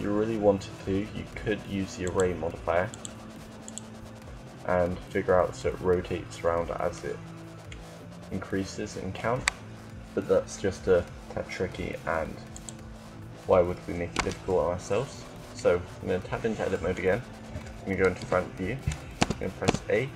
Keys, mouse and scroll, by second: 1.9-6.6 drag, 6.7-12.3 middle drag, 12.3-17.2 drag, 14.1 Tab, 17.8 KP_1, 18.9 a, 19.5 a.